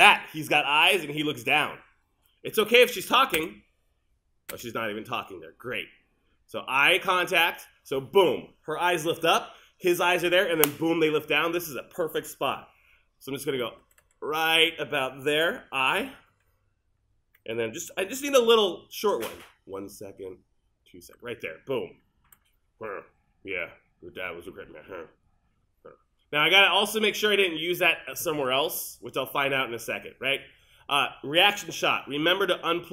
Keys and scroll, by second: 3.4 space, 13.4 Left, 19.4 l.